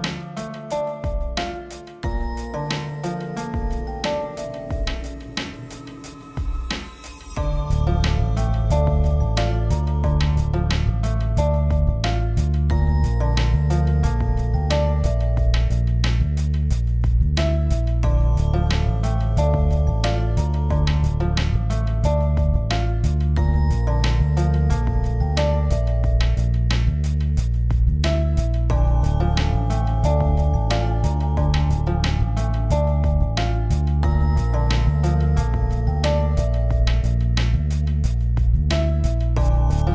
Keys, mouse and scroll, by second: 16.4 m, 17.3-19.3 drag, 20.0 ctrl+0, 21.2 click, 24.7 v, 25.0 click, 27.2-29.1 drag, 34.2 click, 34.5-35.2 scroll up 1, 36.7 click, 37.0-37.5 scroll down 1, 37.5-37.8 scroll up 1, 38.1-38.8 scroll down 1, 38.8-39.2 scroll up 1.